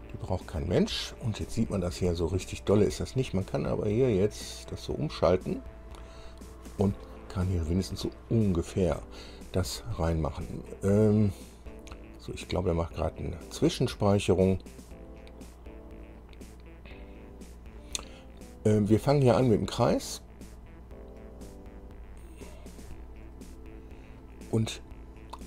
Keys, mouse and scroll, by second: 0.3-1.3 scroll up 4, 2.0 scroll down 2, 2.4 shift+click, 4.5 click, 6.3 scroll up 1, 20.0 click, 20.7 click, 23.4 click.